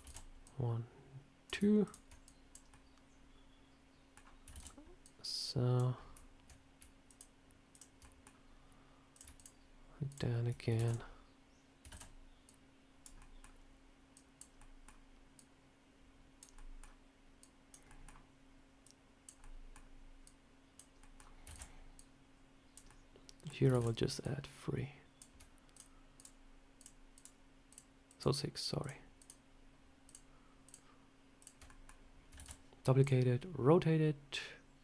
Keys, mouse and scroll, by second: 0.0 shift+d, 0.3 click, 1.7 shift+click, 2.1 click, 2.6 middle click, 4.4 shift+d, 4.9 click, 5.8 scroll down 1, 7.0 shift+click, 7.0 scroll down 1, 7.9 shift+click, 7.9 middle click, 9.0 click, 9.2 shift+click, 10.7 shift+f, 10.7 shift+click, 11.8 shift+d, 12.3 click, 13.1 middle click, 14.0 click, 14.5 middle click, 15.2 click, 16.4 middle click, 17.3 click, 17.8 middle click, 18.7 click, 19.3 middle click, 20.1 click, 20.9 middle click, 21.4 shift+d, 21.8 click, 22.8 middle click, 23.6 shift+d, 24.1 click, 25.6 shift+click, 27.1 shift+click, 31.6 middle click, 32.3 shift+d, 32.9 click.